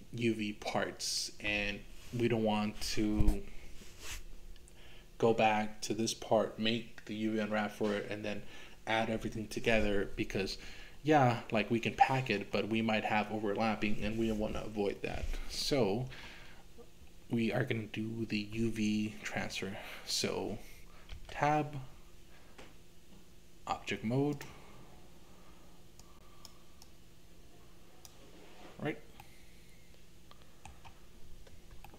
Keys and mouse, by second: 21.2 Tab, 26.1 click, 26.8-28.1 drag, 29.2-30.7 middle drag, 31.8 shift+middle click.